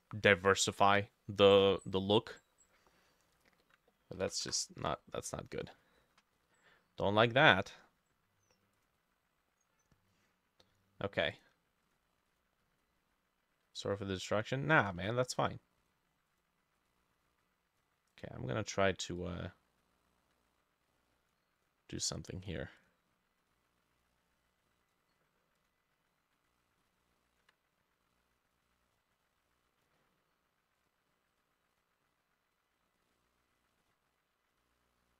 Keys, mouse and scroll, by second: 2.0-2.9 scroll down 11, 2.9 middle click, 4.3 Delete, 4.5 Return, 5.0-5.4 scroll down 2, 5.4 middle click, 6.0-6.3 scroll down 3, 6.4 middle click, 6.7-8.4 scroll down 1, 12.3 double click, 13.8 ctrl+click, 16.8 double click, 19.2 ctrl+click, 22.1 double click, 26.5 ctrl+click, 31.8 double click, 33.2 ctrl+click.